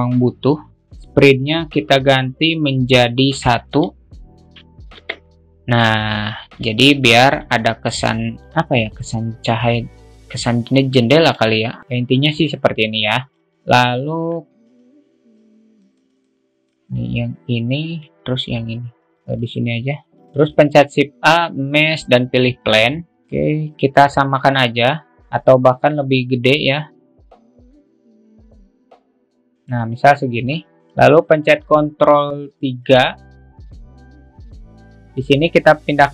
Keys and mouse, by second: 4.1-5.9 drag, 7.3-7.9 alt+shift+middle drag, 12.0-13.3 drag, 13.5 ctrl+z, 14.3 ctrl+z, 16.6 middle click, 20.5 alt+middle click, 21.0 shift+a, 25.3 alt+shift+middle click, 27.3 s, 28.2 alt+shift+middle click, 29.3-30.6 drag, 30.8 alt+middle click, 33.2 ctrl+3, 33.5-36.1 drag.